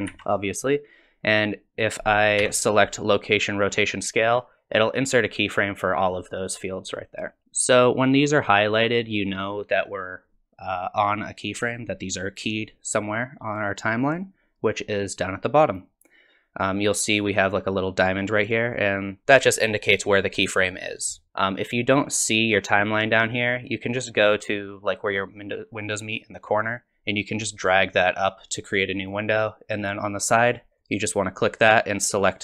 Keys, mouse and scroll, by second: 0.1 ctrl+z, 2.4 i, 15.0 click, 27.1 click, 30.8 click.